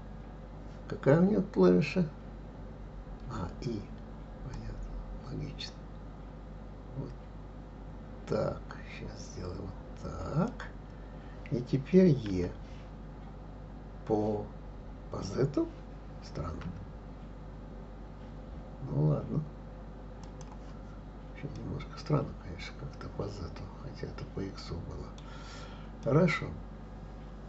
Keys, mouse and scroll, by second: 4.5 click, 12.3 e, 21.5-24.7 middle drag, 26.0-27.4 middle drag.